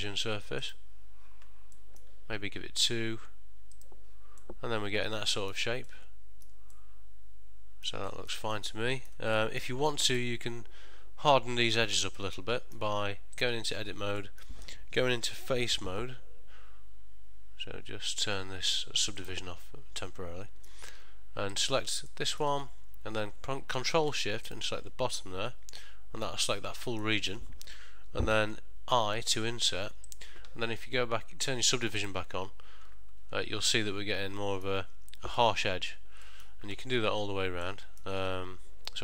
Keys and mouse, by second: 1.8 middle click, 3.9 click, 4.5 middle click, 6.0 ctrl+middle click, 6.9 middle click, 8.2 ctrl+middle click, 8.6 middle click, 9.5 middle click, 10.0 ctrl+middle click, 12.3 middle click, 13.5 click, 13.7 Tab, 14.3 middle click, 16.1 3, 19.3 click, 20.1 middle click, 21.6 click, 22.2 middle click, 24.6 ctrl+shift+click, 25.4 middle click, 27.1 middle click, 29.1 i, 32.2 click, 33.3 Tab, 33.9 middle click, 35.5 middle click, 36.3 middle click, 37.1 Tab, 37.7 middle click.